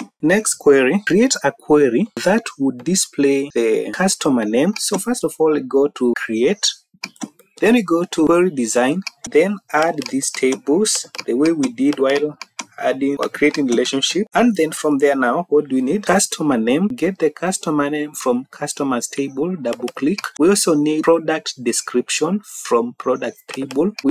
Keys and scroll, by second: 0.2 Down.